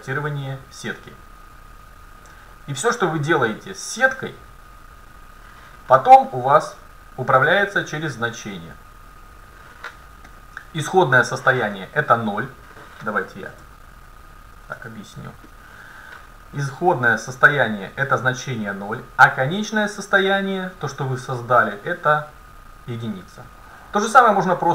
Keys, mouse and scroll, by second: 10.3-12.3 middle drag, 13.7 Tab, 14.8 Tab, 19.2-21.2 drag.